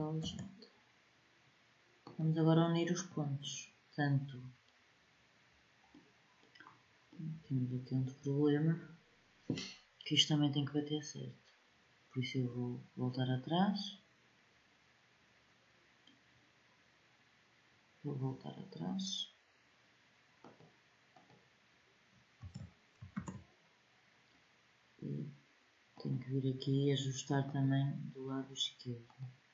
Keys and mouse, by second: 17.9-19.3 drag, 20.2-22.2 drag, 22.2 ctrl+z, 22.9 ctrl+z, 25.7-29.3 drag.